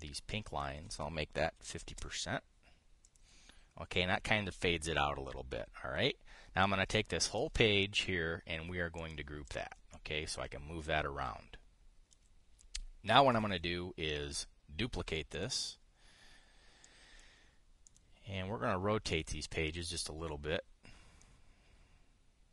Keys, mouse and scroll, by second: 0.7 click, 2.3 KP_5, 2.4 KP_0, 2.6 Return, 3.8 click, 7.3-8.2 drag, 9.6 click, 10.2 click, 10.6-12.9 drag, 16.0 click, 17.6 click, 18.6 click, 19.8 click, 21.9-22.5 drag.